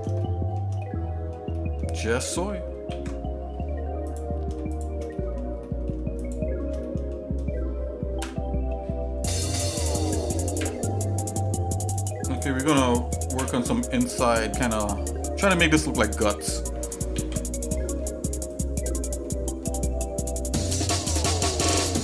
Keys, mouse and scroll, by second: 0.2 shift+middle click, 0.8 middle click, 1.5 shift+middle click, 2.1 middle click, 3.0 ctrl+s, 4.1 click, 4.7 shift+click, 5.1 middle click, 5.6 middle click, 6.2 shift+click, 6.8 middle click, 8.2 KP_Divide, 10.9 KP_Divide, 11.9 shift+click, 13.4 KP_Divide, 14.2 shift+middle click, 14.7 middle click, 15.1 scroll up 1, 15.5 middle click, 16.1 middle click, 17.2 ctrl+s, 17.7 middle click, 18.5 click, 19.2 middle click.